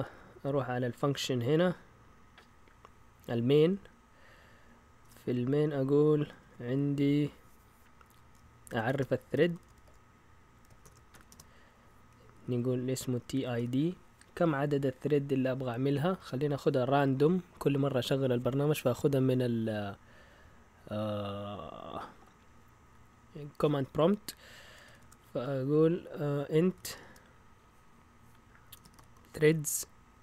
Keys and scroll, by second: 5.0 Return, 5.5 Up, 6.4 Tab, 8.4-11.3 typing, 12.4-13.5 typing, 24.6 Escape, 24.9 typing, 26.4-27.4 typing, 28.5-29.9 typing.